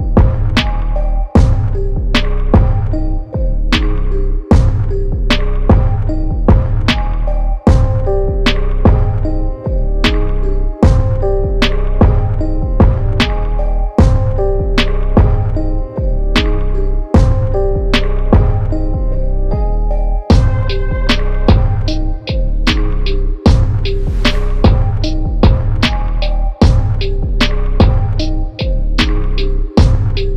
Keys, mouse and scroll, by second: 4.4 click, 6.5 0, 23.2 click, 28.6-29.7 typing.